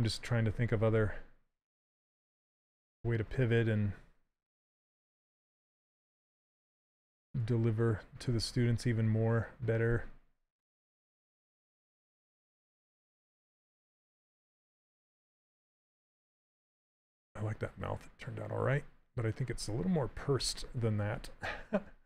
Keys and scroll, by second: 20.6 s.